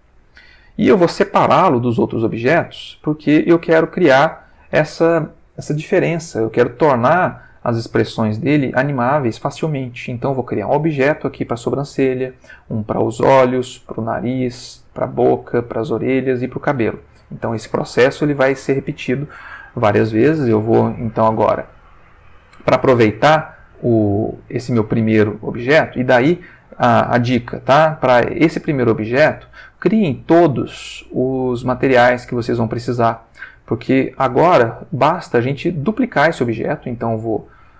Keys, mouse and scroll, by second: 20.8 ctrl+middle click, 25.4 ctrl+middle click, 27.7 click, 29.5 click, 35.1 click, 37.1 ctrl+Tab.